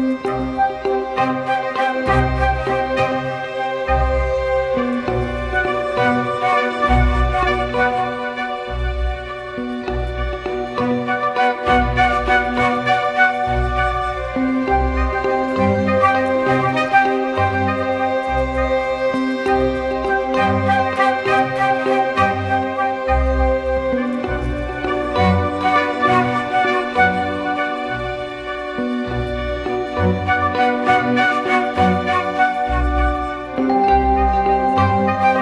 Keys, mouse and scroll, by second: 4.7 typing, 27.1-27.9 typing, 28.0 double click, 32.9 ctrl+-, 33.1 ctrl+-, 33.2 ctrl+-, 33.4-35.4 ctrl+-.